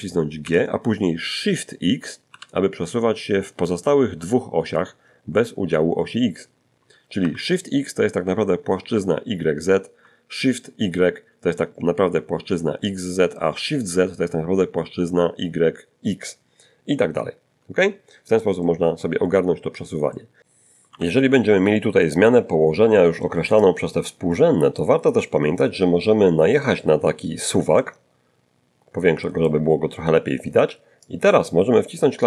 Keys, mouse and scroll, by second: 0.4 g, 2.3 shift+x, 7.2 Escape, 18.5-20.0 middle drag, 20.1 middle click, 21.2 n, 23.9 click, 26.0 scroll up 1, 28.0-29.9 ctrl+middle drag, 31.3 click.